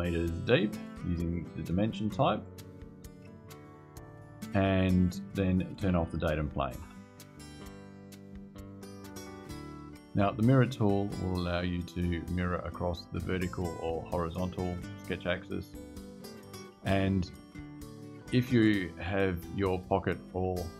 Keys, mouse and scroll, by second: 2.2 click, 5.7 click, 6.5 space.